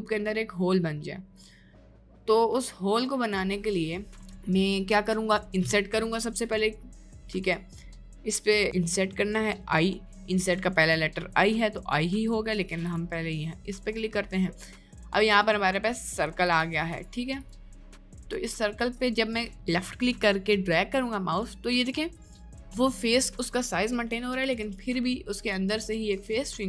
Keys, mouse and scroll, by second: 5.0 click, 6.5 middle click, 7.3 middle click, 8.8 middle click, 9.8 middle click, 12.9 click, 15.9 middle click, 16.5 click, 18.4-26.6 drag.